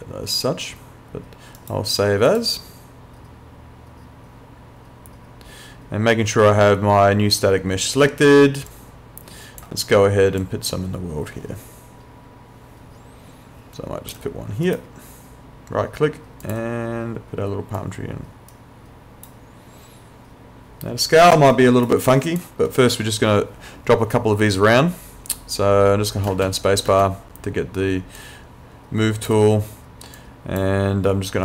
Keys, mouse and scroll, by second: 1.6 right click, 2.3 click, 8.7 click, 14.7 right click, 16.4 click, 18.5 right click, 21.5 right click, 26.3 space, 28.2 click.